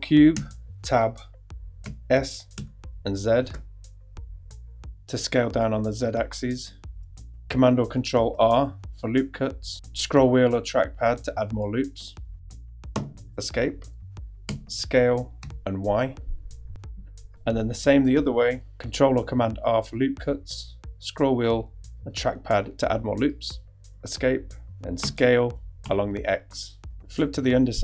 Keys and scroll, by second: 0.3 super+Tab, 1.8 s, 2.5 z, 8.4 super+r, 12.9 super+z, 14.5 s, 15.4 y, 18.7 super+r, 23.8 super+z, 25.0 s, 25.8 x.